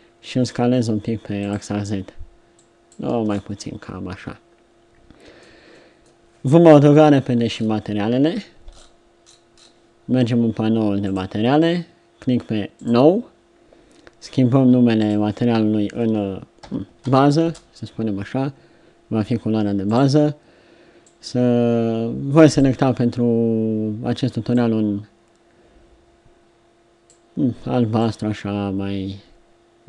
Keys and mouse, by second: 3.1 Tab, 5.6 middle click, 6.8 KP_7.